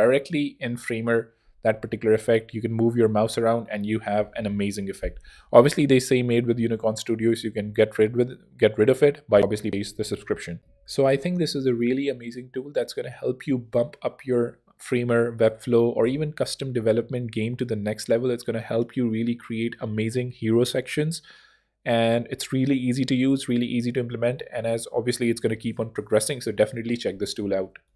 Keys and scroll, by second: 7.6 ↺, 10.5 ctrl+super+r.